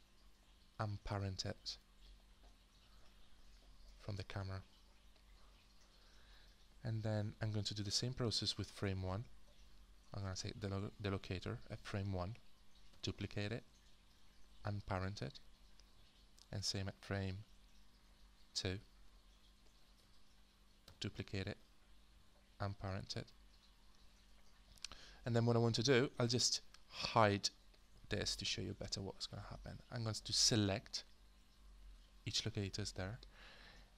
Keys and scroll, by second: 12.9 ctrl+d, 20.9 ctrl+d, 28.4 h.